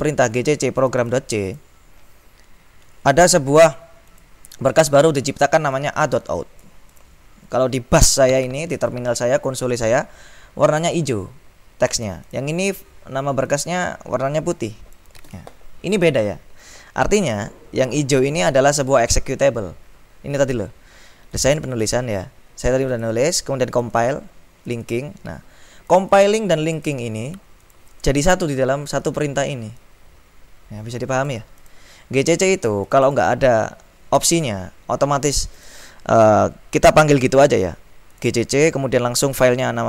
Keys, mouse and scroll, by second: 0.5-2.2 drag, 4.2 click, 5.8-7.6 drag, 11.2-12.9 drag, 13.5-16.0 drag, 21.5-22.5 drag, 23.0 click, 23.8 click, 24.8 click, 26.0 click, 27.1 click, 27.7 click, 30.1-32.5 drag, 33.0 click, 35.7 click, 38.3 click, 39.4-39.8 drag.